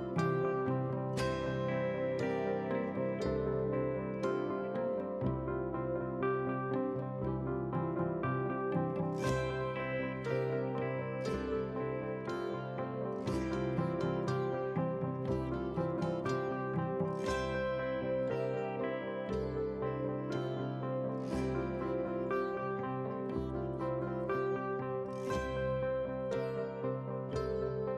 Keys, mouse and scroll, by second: 0.3-0.9 scroll down 5, 0.4 shift+middle click, 1.1 middle click, 3.3 shift+d, 4.6 KP_1, 5.4 g, 6.5 middle click, 6.6 shift+middle click, 7.0 scroll up 3, 7.2 shift+middle click, 7.3 shift+middle click, 7.4 shift+middle drag, 7.8 click, 8.2 3, 8.4 click, 8.8 g, 9.9 middle drag, 10.2 shift+click, 10.5 g, 11.2 scroll down 1, 11.3 middle drag, 11.6 click, 12.1 drag, 12.4 click, 12.7 scroll down 1, 12.8 click, 13.1 click, 13.4 middle drag, 14.0 scroll down 2, 15.2 click, 16.1 click, 16.6 click, 18.2 click, 19.1 scroll down 2, 19.3 shift+middle click, 19.5 middle drag, 19.7 click, 19.9 scroll down 1, 20.9 middle drag, 21.1 scroll up 3, 21.3 shift+middle click, 21.8 click, 23.0 drag, 23.6-24.1 scroll down 1, 24.1 scroll up 3, 24.3 shift+middle click, 24.9 alt+click, 25.8 shift+d, 27.0 KP_7, 27.3 scroll down 1, 27.5 middle click.